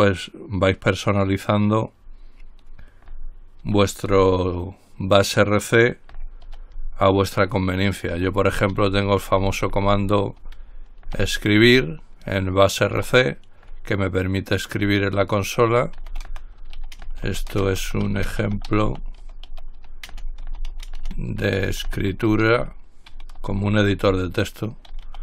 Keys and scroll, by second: 3.9 ctrl+x, 8.9 ctrl+l, 8.9-12.3 typing, 13.2 Return, 16.3-24.1 typing, 25.1-25.2 typing.